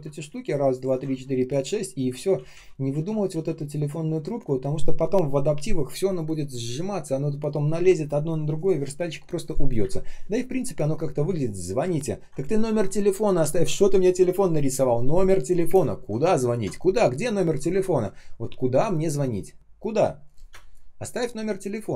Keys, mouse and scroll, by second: 0.3 ctrl+shift+click, 0.7 ctrl+shift+click, 1.1 alt+click, 2.1 ctrl+z, 3.6 ctrl+click, 4.0 ctrl+z, 9.7 Delete, 11.8-12.9 ctrl+scroll up 1, 16.3-17.5 ctrl+scroll down 1, 17.7 ctrl+scroll up 1, 20.4 space, 20.9 space.